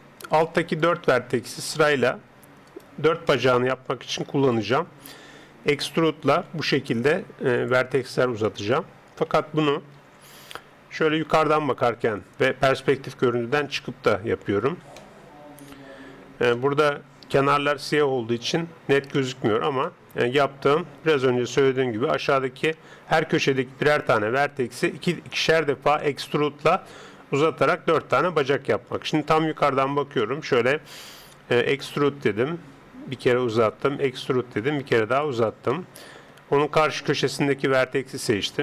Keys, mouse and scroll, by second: 0.3-4.5 right drag, 3.3-6.4 middle drag, 6.4 e, 8.1 e, 9.7 ctrl+z, 10.0 ctrl+z, 11.1 KP_7, 14.3 KP_5, 14.4-29.0 middle drag, 29.0 KP_7, 30.0 middle click, 31.6 middle click, 31.6 e, 33.6 e, 35.7-37.9 middle drag, 37.0 click, 37.9 KP_7.